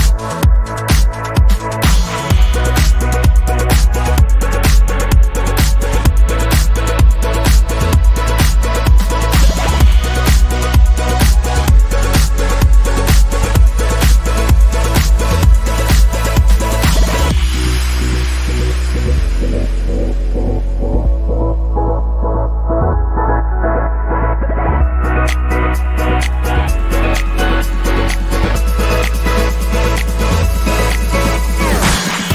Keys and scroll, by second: 23.7 Down, 24.4 Down, 24.8 Down, 25.3 Down, 25.4 Down, 25.6-26.1 Down, 26.5 Up, 27.0 Up, 27.5 Left.